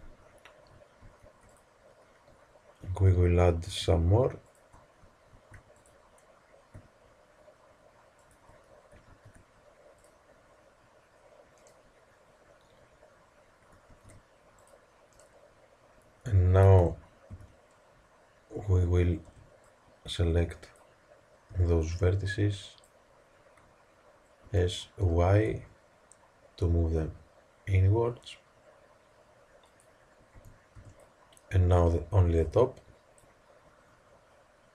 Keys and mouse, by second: 1.0 ctrl+r, 5.3 ctrl+r, 9.0 ctrl+r, 13.8 ctrl+r, 16.6 z, 17.3 a, 19.2 b, 21.5 b, 24.4 s, 30.3 a, 30.7 b, 32.2 b.